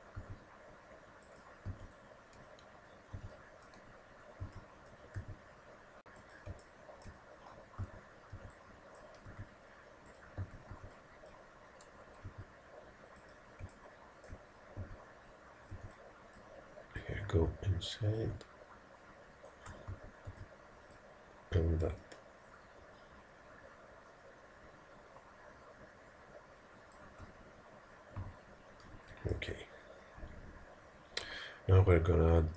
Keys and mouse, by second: 0.2 g, 1.7 a, 3.2 b, 4.5 b, 5.2 g, 6.6-7.9 middle drag, 7.9 a, 8.3 b, 9.3 g, 10.7 a, 10.7 b, 12.3 g, 13.8 middle click, 14.0 middle click, 14.9 a, 15.8 b, 17.0 click, 20.0 a, 20.3 b, 21.9 click, 28.3 a, 29.0 z.